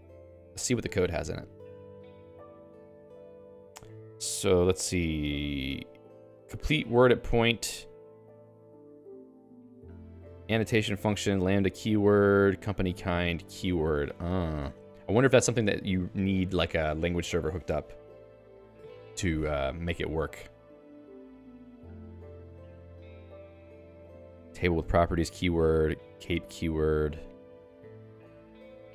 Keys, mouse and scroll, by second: 2.0 Return, 4.4 j, 5.0-6.6 l, 7.0 l, 8.4 Return, 9.0-15.4 typing, 19.8-28.9 typing.